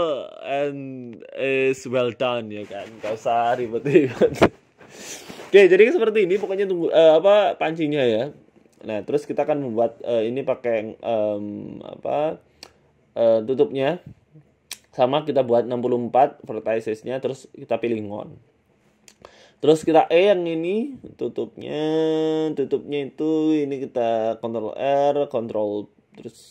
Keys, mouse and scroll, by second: 0.6 Tab, 1.0 KP_1, 1.5 shift+middle click, 1.8 shift+a, 3.6-4.1 scroll down 5, 4.4-5.0 scroll down 8, 5.0-5.4 scroll up 9, 5.4 scroll down 1, 5.7 ctrl+z, 5.9 right click, 6.3 shift+s, 7.3 shift+a, 9.3 click, 9.9 click, 11.8 click, 13.0 click, 13.5 s, 14.3 g, 15.4 scroll up 2, 15.4 scroll down 1, 15.8 shift+middle click, 16.3-16.7 scroll down 1, 16.7 s, 17.4 e, 18.1 Tab, 18.4 e, 19.7 s, 21.8 scroll up 4, 22.0 shift+middle click, 22.4-23.1 scroll down 2, 22.7 click, 23.4 ctrl+r, 24.0 s, 25.8 s.